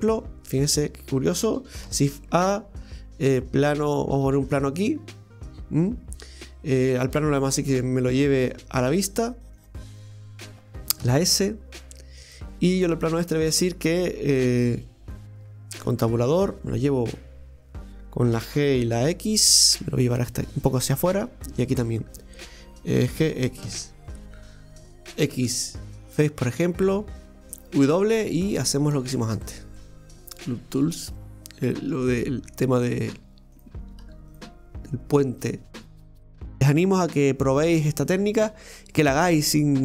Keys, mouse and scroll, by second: 0.6 click, 7.5 click, 8.4-11.0 drag, 11.0 s, 14.6 click, 16.0 Tab, 16.5 right click, 18.3 g, 21.7 right click, 23.0 g, 24.9 ctrl+z, 26.9 middle click, 27.8 w, 29.7-31.9 middle drag, 31.9 ctrl+r, 35.7 middle click, 36.3 scroll down 1.